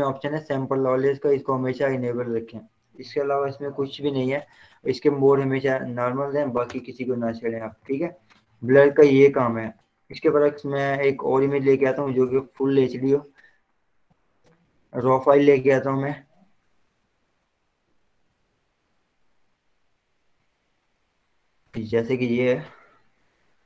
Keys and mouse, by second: 1.5 click, 6.9 Return, 8.0 ctrl+0, 8.6 ctrl+z, 10.4 ctrl+o, 11.4 click, 13.8 click, 18.3 click, 18.5 click, 22.2 click.